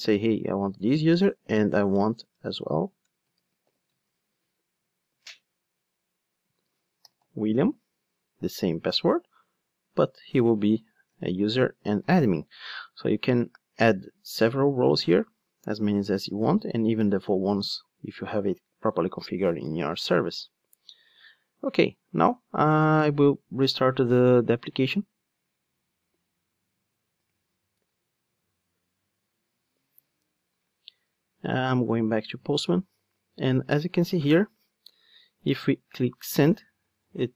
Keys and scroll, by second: 5.2 super+v, 24.8 ctrl+d.